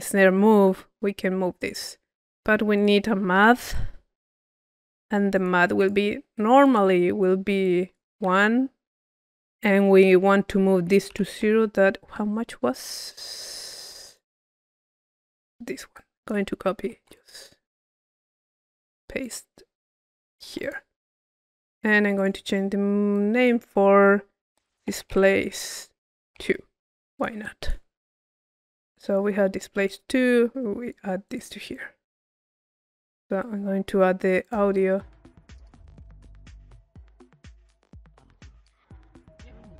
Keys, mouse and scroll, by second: 2.2 click, 2.4 right click, 2.7 click, 4.5 click, 5.4 click, 5.8 click, 6.6 click, 7.6 click, 9.0-10.5 drag, 12.3-13.7 middle drag, 12.3-13.7 scroll up 1, 15.9 click, 17.1 click, 19.2-20.9 drag, 21.0 middle click, 22.1 click, 23.2 click, 27.2 click, 28.5 click, 29.8-31.2 drag, 31.7 click, 33.5 middle click, 34.4-35.4 drag, 38.9-39.7 middle drag.